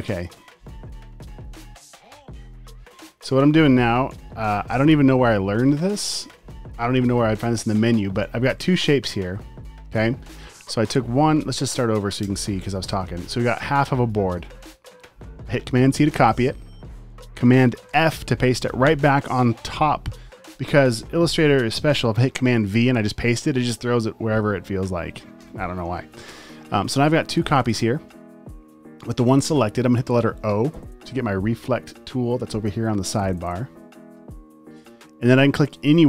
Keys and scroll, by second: 0.9 super+j, 1.7 space, 4.1 super+j, 5.2 super+z, 6.0 space, 8.4 v, 10.4 space, 12.4 BackSpace, 12.7 space, 14.2 space, 15.9 super+c, 17.9 super+f, 22.8 super+v, 25.5 BackSpace, 28.2 super+z, 30.5 o.